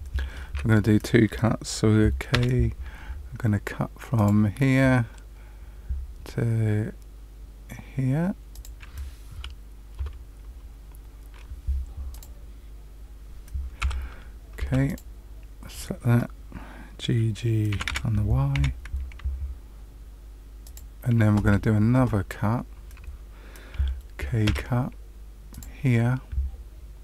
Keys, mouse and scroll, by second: 2.3 k, 12.1 click, 13.8 2, 14.5 2, 14.8 click, 17.7 g, 22.4-23.7 scroll up 1, 24.4 k.